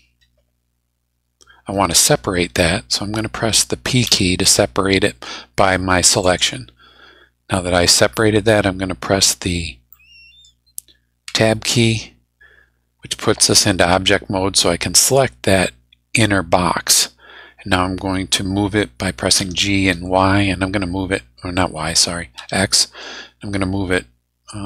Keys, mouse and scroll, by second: 0.2-1.2 scroll up 5, 4.0 p, 6.2 click, 9.9 middle click, 11.2 Tab, 15.0 click, 19.4 g, 19.9 y, 22.4 x.